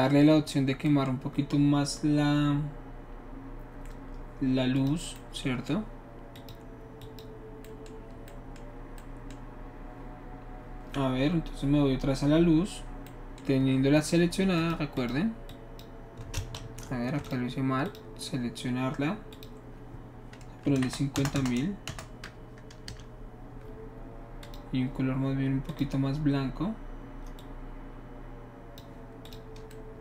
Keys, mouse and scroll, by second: 4.8 click, 6.4 click, 7.0 drag, 7.6-13.5 middle drag, 14.0 click, 14.6 click, 15.0 click, 15.5 click, 16.6 ctrl+z, 17.2 click, 17.9 click, 19.4 click, 20.7-21.9 typing, 22.9 Return, 24.4 click, 25.7 click, 27.4-28.8 drag, 29.2 click.